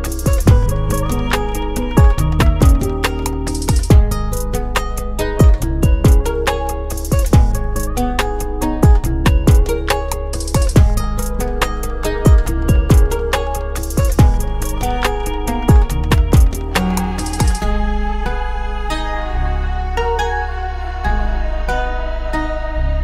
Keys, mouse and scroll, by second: 1.3 F9, 3.3 click, 5.5 click, 6.2 ctrl+o, 10.1 click, 15.9 F9, 17.5 click, 18.5 click, 22.2 click, 22.9 click.